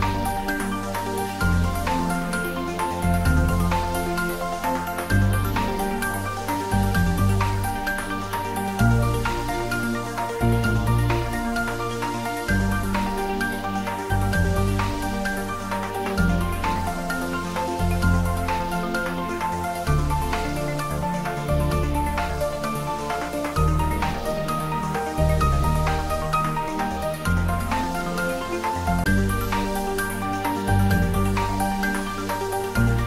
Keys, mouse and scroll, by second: 0.0-0.6 scroll down 1, 1.6 g, 2.0 z, 3.1 click, 3.6 s, 4.2 click, 4.7 g, 5.1 z, 6.1 click, 10.3-12.0 typing, 12.1 Return, 12.8-13.9 scroll up 1, 14.4 click, 16.8-18.8 typing, 18.9 Return, 21.0-21.7 scroll up 1, 22.1-23.4 middle drag, 24.3-24.7 scroll down 1, 28.6-30.3 scroll down 1, 30.3 click, 32.5 click.